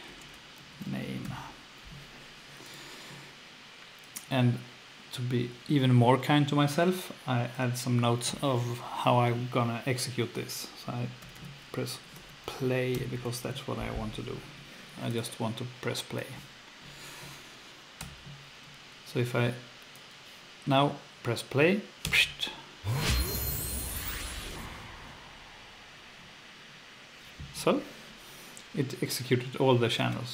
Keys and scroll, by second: 0.0-1.7 typing, 11.0-13.4 typing, 18.0 F1, 22.0 F2.